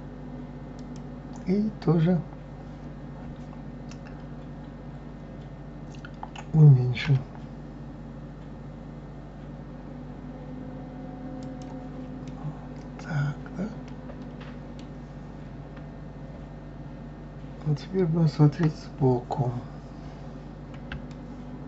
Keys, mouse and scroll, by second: 12.2-18.6 middle drag, 18.6 KP_3, 20.3-21.1 scroll up 2, 21.1-21.6 shift+middle drag.